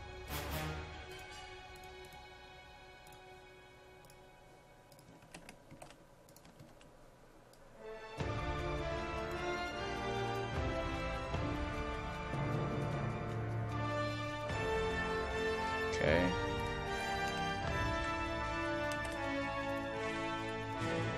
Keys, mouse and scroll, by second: 5.8 ctrl+c, 6.3 click, 6.6 ctrl+v, 7.6-16.3 drag, 16.9 ctrl+a, 17.3 ctrl+v, 18.0 ctrl+z, 19.0 c, 19.7 click, 20.0 ctrl+v, 20.5-21.1 drag.